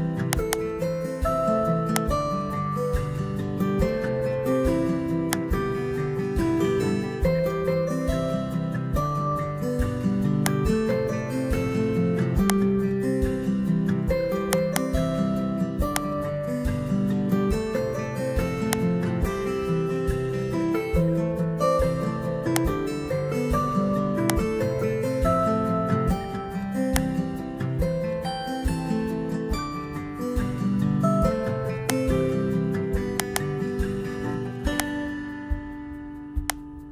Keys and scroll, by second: 6.6 ctrl+v, 20.7 ctrl+v.